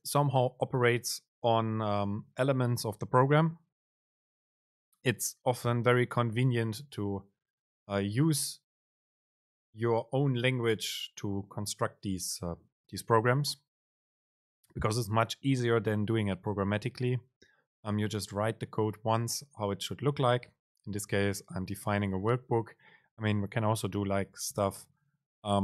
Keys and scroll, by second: 25.1 super+space.